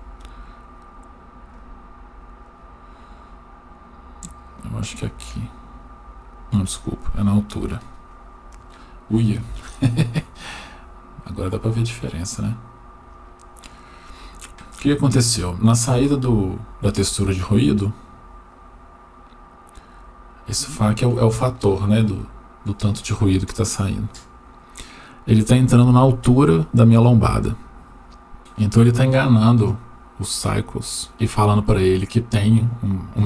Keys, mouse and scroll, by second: 4.5 click, 4.7 click, 6.5-7.2 drag, 9.5-11.4 shift+middle drag, 11.8-12.5 scroll down 2, 13.1 middle click, 15.3 click, 16.1 shift+middle click, 17.6-18.4 drag, 24.0-26.2 drag.